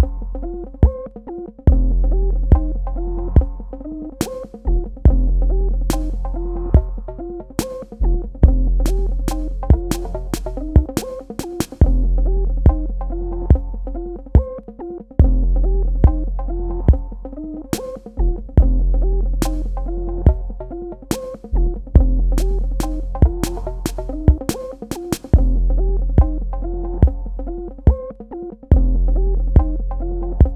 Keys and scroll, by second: 0.2 space, 1.8 ctrl+z, 2.5-4.2 typing, 11.0 space, 19.2 space, 25.2 v.